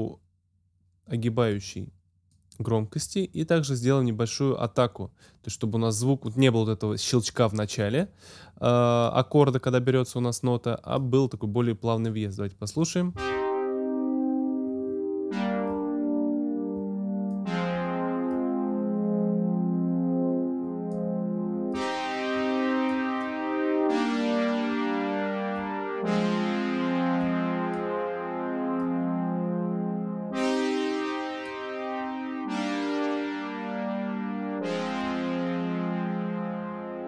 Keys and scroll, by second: 13.1 space.